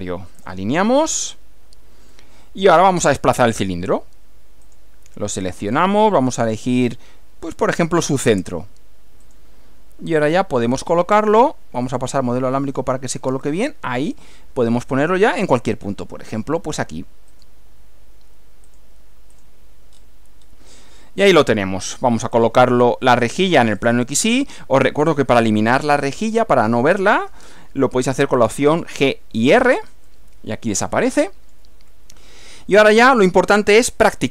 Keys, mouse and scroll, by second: 0.4 click, 2.1-3.8 middle drag, 4.6 click, 5.8 click, 9.2 click, 11.8 click, 12.7 click, 17.3 click, 18.7 click, 19.4 click, 19.9 scroll down 1, 20.4 scroll down 1, 20.8 middle click, 22.4 click, 23.8 click, 24.8-25.9 middle drag, 26.1-26.5 scroll up 2, 26.6 scroll down 2, 29.0 g, 29.3 r, 30.0-31.7 middle drag, 31.9-33.2 middle drag.